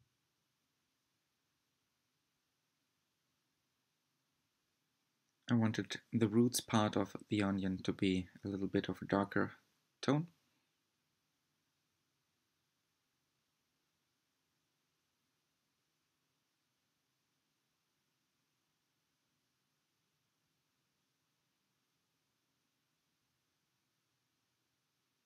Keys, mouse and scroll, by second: 5.0-10.0 drag, 10.0-10.3 scroll up 6, 10.8-15.1 shift+middle drag, 15.1-20.2 drag, 21.5-25.2 drag.